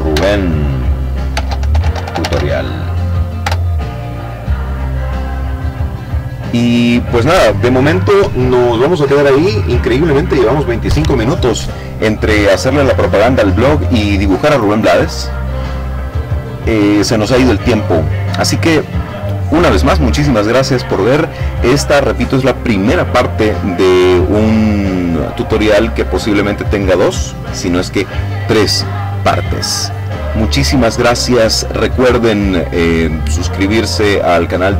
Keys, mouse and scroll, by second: 0.0-1.1 typing, 1.7 Return, 4.2-5.3 drag.